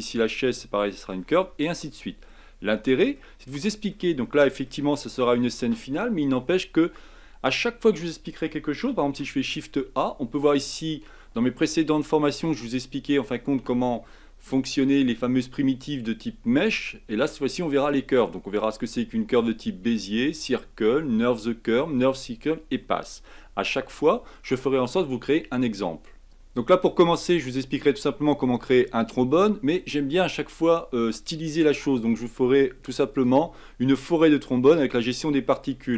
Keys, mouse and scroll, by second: 0.3-1.3 middle drag, 1.3 Tab, 1.4-1.8 scroll down 4, 1.9-2.3 shift+middle drag, 2.3 shift+scroll up 1, 2.6-2.9 scroll down 3, 2.9-4.0 middle drag, 4.0 shift+scroll up 1, 4.2-7.9 middle drag, 9.0 shift+a, 26.3-28.2 shift+middle drag, 33.1 click, 33.6 scroll down 3, 34.0-35.9 middle drag.